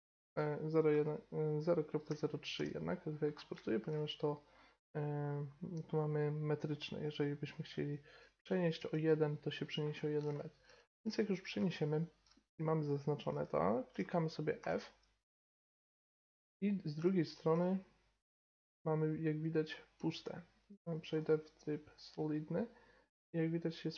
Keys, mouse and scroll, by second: 3.3-8.7 middle drag, 8.4 g, 9.9-12.3 middle drag, 12.4-13.7 middle drag, 14.6 f, 16.6 click, 16.7 middle click, 18.1-19.9 middle drag, 20.6-22.3 drag, 22.3-23.9 middle drag.